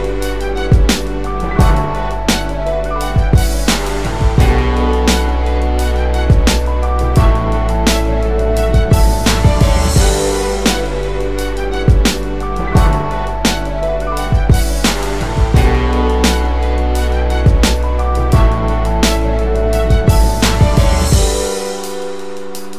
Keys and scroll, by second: 4.6 Tab, 5.4 Tab, 5.5 typing, 14.6 space, 16.3 typing, 22.2 Tab.